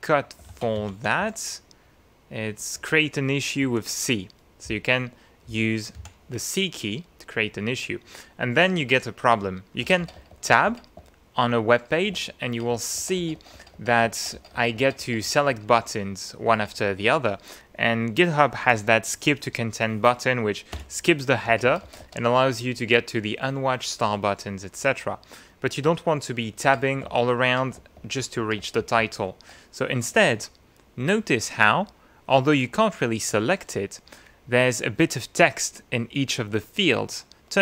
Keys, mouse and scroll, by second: 0.5 ctrl+f, 0.8 ctrl+n, 0.9 ctrl+e, 1.2 ctrl+w, 2.8 Escape, 3.6 Escape, 4.7 click, 6.0 c, 9.8 Tab, 16.5 shift+Tab, 20.8 Return, 21.5 Tab, 25.9 Tab.